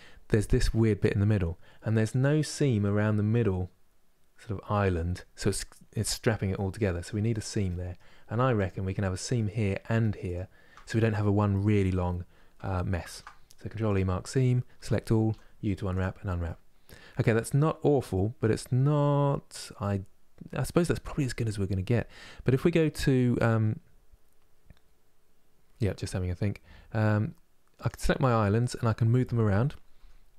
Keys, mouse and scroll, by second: 1.6-4.6 middle drag, 6.2-8.3 middle drag, 8.3 click, 9.0 middle click, 10.0 shift+click, 13.6 ctrl+e, 14.4 a, 15.6 u, 28.3 click, 29.7 g.